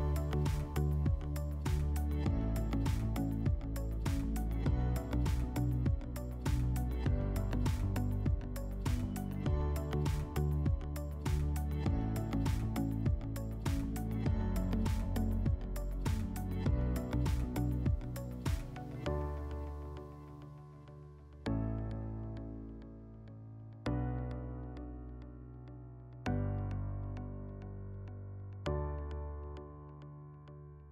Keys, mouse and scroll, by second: 0.5 click, 1.5 click, 4.4 click, 5.3 click, 7.2 click, 14.4 w, 18.8-20.4 drag, 20.7-22.3 drag.